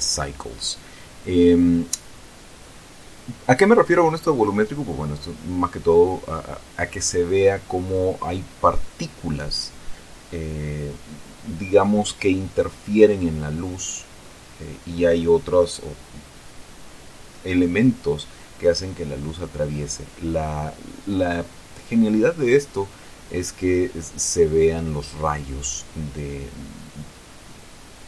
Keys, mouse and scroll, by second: 1.0-2.2 ctrl+middle drag, 2.4-3.0 scroll up 1, 3.7-5.3 middle drag, 7.7 scroll down 1, 10.7-11.1 scroll up 2, 12.3 ctrl+alt+KP_0, 14.0 middle click, 15.3 r, 18.9 click, 19.5 right click, 22.0 Tab, 23.0 w, 24.9 click, 26.6 click.